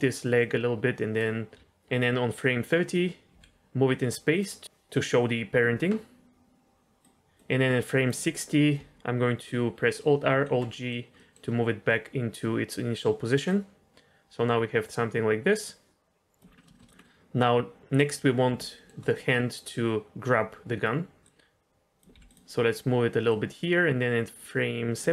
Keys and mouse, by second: 0.4 click, 1.5 g, 1.6-2.9 drag, 3.3 g, 7.1 click, 7.2 shift+d, 7.3 click, 9.3 alt+r, 10.2 alt+g, 10.7 middle click, 11.1 middle click, 13.4-16.4 drag, 16.6 middle click, 16.7 shift+middle drag, 17.0 middle click, 18.7 shift+middle click, 21.2 click, 22.1 g, 23.4-24.9 drag.